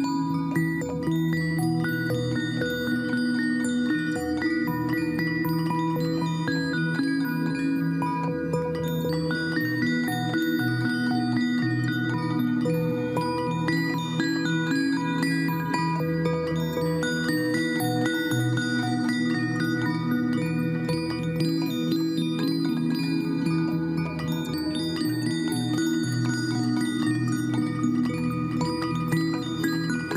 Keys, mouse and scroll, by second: 19.9 ctrl+t.